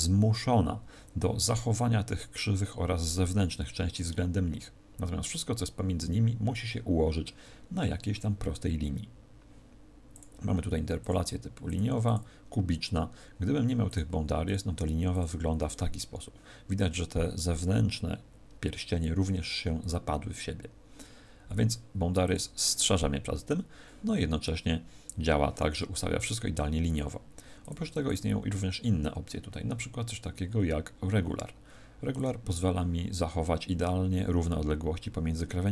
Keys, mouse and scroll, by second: 10.0 click, 11.6 click, 13.8 click, 14.4 click, 22.2 click, 27.5 click, 32.1 click.